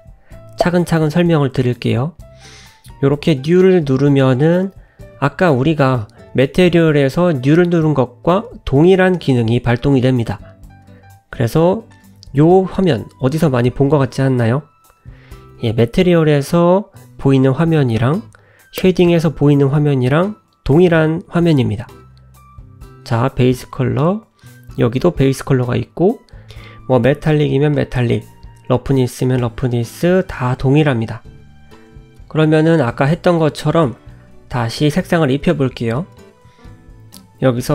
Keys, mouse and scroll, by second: 12.9 click.